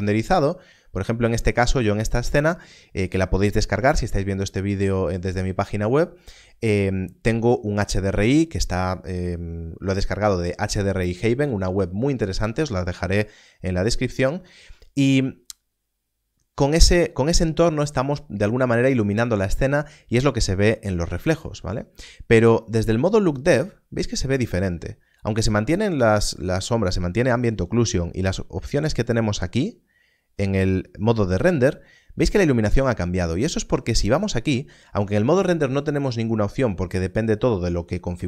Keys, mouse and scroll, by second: 0.5 scroll down 1, 23.3 click, 34.0 click.